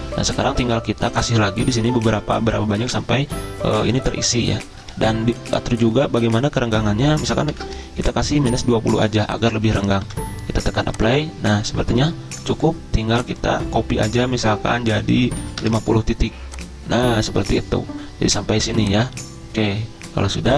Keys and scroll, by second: 4.7 ctrl+z, 7.2-8.1 typing, 10.0 -, 12.5 ctrl+z, 15.2-16.1 typing.